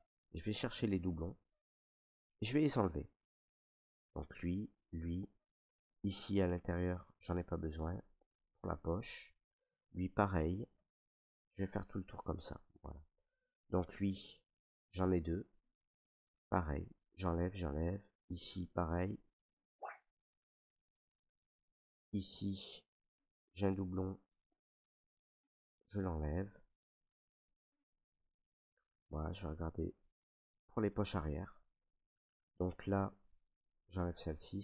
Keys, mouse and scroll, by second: 0.1 right click, 0.7 alt+right click, 2.0 ctrl+right click, 3.4 right click, 4.4 click, 5.3 alt+right click, 7.1 right click, 9.0 right click, 10.0 click, 10.0 ctrl+right click, 10.6 alt+right click, 11.8 click, 12.4 alt+right click, 13.1 ctrl+right click, 14.0 alt+right click, 14.9 right click, 16.5 click, 17.1 click, 18.4 click, 19.0 click, 20.0 ctrl+right click, 21.3 right click, 21.9 alt+right click, 22.7 right click, 23.4 ctrl+right click, 23.5 ctrl+right click, 24.5 right click, 25.5 click, 25.5 click, 26.4 ctrl+right click, 27.6 right click, 28.6 right click, 28.6 ctrl+right click, 29.1 alt+right click, 30.6 right click, 31.3 ctrl+right click, 32.0 alt+right click, 33.2 right click, 34.0 right click, 34.2 ctrl+right click.